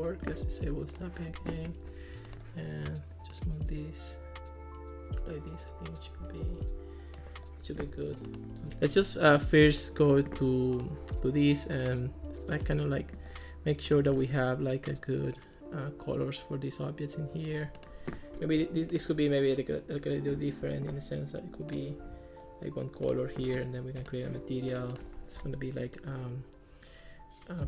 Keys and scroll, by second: 27.5-27.6 typing.